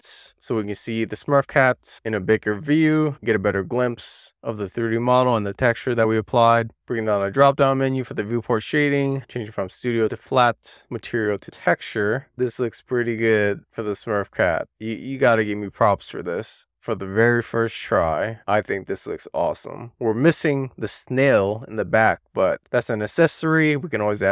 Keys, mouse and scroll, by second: 2.7-5.7 middle drag, 8.2-12.3 drag, 12.6 shift+middle click, 13.2-17.1 middle drag, 17.6 click, 17.8 Tab, 18.2 click, 19.5 click, 20.3 click, 20.6 middle click, 21.3 drag, 21.9-22.3 scroll up 1, 22.3 scroll down 1, 22.6 shift+middle drag, 22.8-24.3 middle drag.